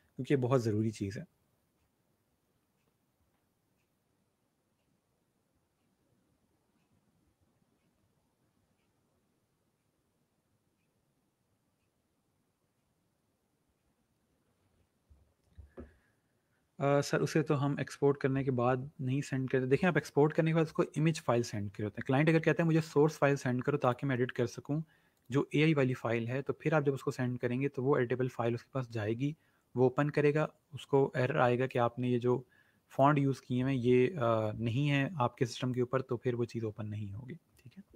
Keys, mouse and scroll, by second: 23.7 click, 31.6 click.